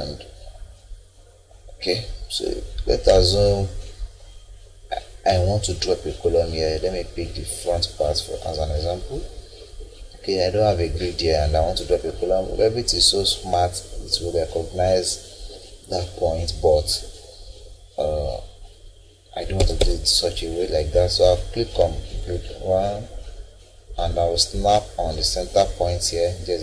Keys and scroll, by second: 19.3 Escape.